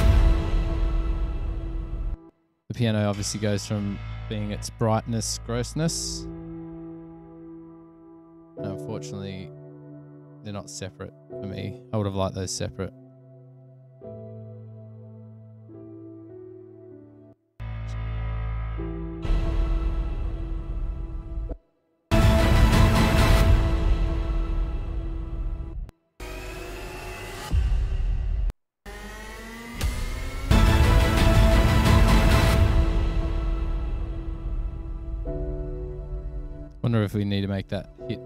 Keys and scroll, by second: 0.9 super+], 1.1 super+], 2.4-3.2 typing, 5.1-7.1 typing, 16.9 F7, 17.5 space, 17.7 space, 19.5 s, 20.8 super+[, 21.0 super+[, 21.7 space, 26.0-26.3 typing, 28.7-29.0 typing, 29.5 super+=, 30.7 s, 38.0 super+=.